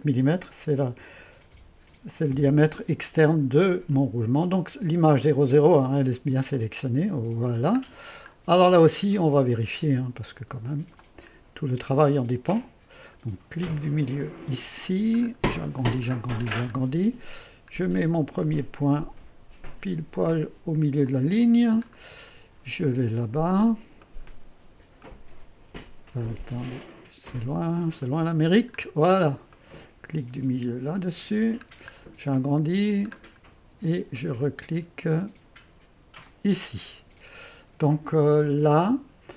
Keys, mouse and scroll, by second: 1.3-2.8 typing, 6.5-7.6 drag, 7.8-8.3 scroll up 1, 8.3-10.8 scroll up 1, 11.0-12.6 drag, 12.6-13.6 scroll up 1, 14.6 middle click, 15.2-17.6 scroll up 2, 17.6-20.5 scroll down 2, 21.1-22.1 drag, 22.1-23.2 scroll down 2, 23.2-24.5 drag, 25.1-26.1 drag, 26.3 middle click, 26.8 click, 26.9-28.8 middle drag, 28.8-29.6 scroll up 2, 29.6 click, 31.4 middle click, 31.9-32.7 scroll up 1, 32.7-35.6 scroll up 1, 35.6 middle click, 36.3 click.